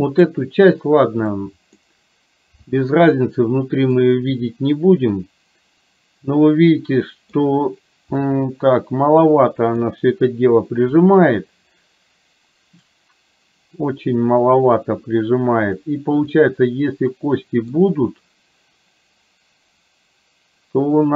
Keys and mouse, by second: 0.0 middle click, 1.4 middle click, 4.2-7.3 middle drag, 8.3-9.7 middle drag, 16.3-17.9 middle drag.